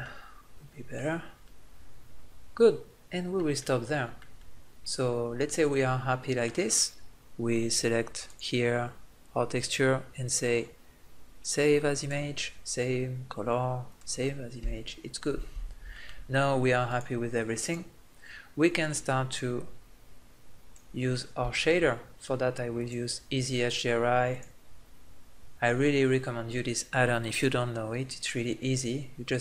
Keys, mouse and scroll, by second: 1.6-3.1 middle drag, 3.4-5.8 middle drag, 8.0-11.1 drag, 14.2-15.9 drag, 20.7-21.8 middle drag.